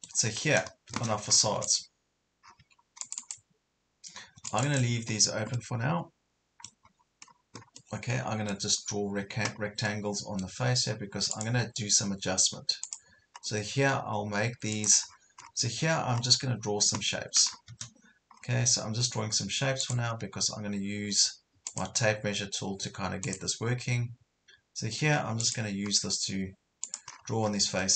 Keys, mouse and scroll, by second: 0.4 scroll up 1, 1.1-1.5 scroll down 2, 1.5 Escape, 1.6 click, 2.4 scroll down 1, 2.6 Escape, 2.9 scroll up 1, 3.0 click, 3.8-4.2 scroll up 1, 4.2 scroll down 1, 4.4 Escape, 4.5 click, 5.1 scroll up 1, 5.6-6.8 middle drag, 7.2 scroll up 1, 7.8-8.8 middle drag, 8.8 scroll down 1, 9.8 middle click, 11.4 click, 13.3 scroll up 1, 14.8 click, 15.1-15.6 scroll down 2, 16.0 scroll up 1, 17.5 scroll down 1, 18.4 scroll up 1, 19.8-27.1 drag, 27.1 scroll down 1, 27.8 middle click.